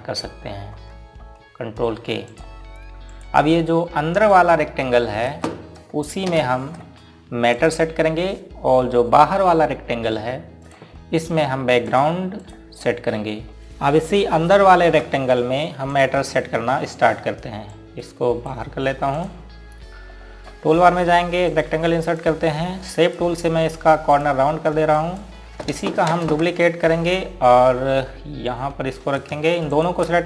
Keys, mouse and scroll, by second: 1.0 k, 3.4 click, 6.3 z, 7.3 shift+Page_Down, 8.6 click, 11.7 click, 17.0 click, 21.2 scroll up 1, 22.6 click, 27.3 space, 27.7 click, 30.0 right click.